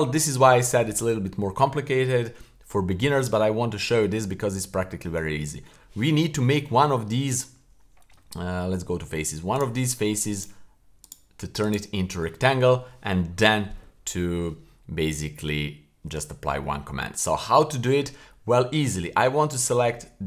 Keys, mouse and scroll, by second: 0.3 shift+middle click, 0.8-2.8 scroll down 1, 4.5-5.1 scroll up 1, 5.3 shift+middle click, 8.1 Tab, 9.5 right click, 10.3-11.1 right drag, 11.6 right click, 17.1 scroll up 1, 17.5 shift+middle click, 19.5 click.